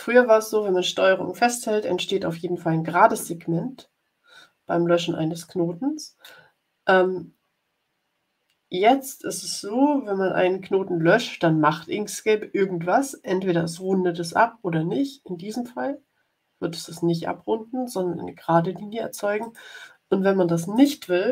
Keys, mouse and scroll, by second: 15.8 Delete, 19.3 click, 20.7 click.